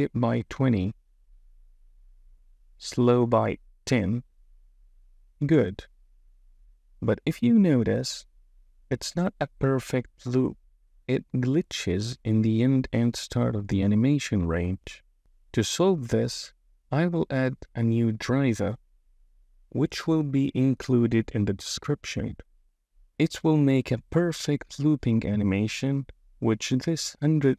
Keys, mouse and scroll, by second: 1.4 space, 2.7-5.4 drag, 4.2 BackSpace, 6.0 space, 15.4-20.9 right drag, 21.8-24.5 drag, 25.8 space.